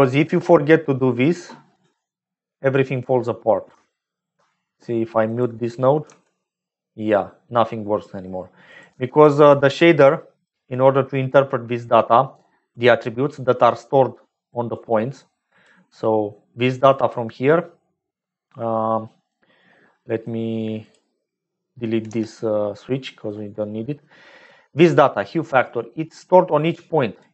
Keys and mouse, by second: 0.1 click, 3.8 shift+click, 6.0 m, 8.6 click, 9.0 m, 10.8 click, 12.0 click, 12.8 click, 13.1 click, 14.6 click, 15.0 click, 17.0 click, 18.2 click, 19.9 click, 20.7 click, 22.2-22.9 typing, 22.9 click.